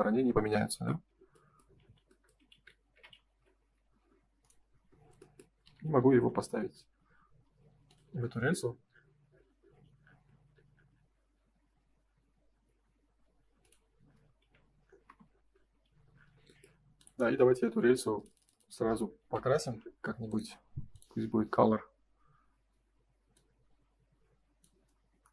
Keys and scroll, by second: 0.8 ctrl+s, 1.8 ctrl+z, 5.5 m, 6.1 F3, 14.3 F4, 15.0 space, 15.8 ctrl+s.